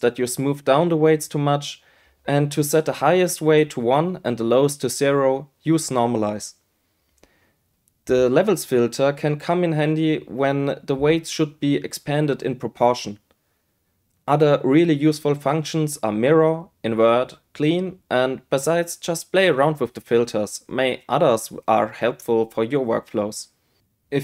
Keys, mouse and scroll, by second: 1.9-4.2 drag, 5.8 q, 8.0-9.0 drag, 9.3-11.8 drag, 13.7-14.9 drag, 15.9-17.0 drag, 18.2-19.6 drag, 20.8-24.2 drag.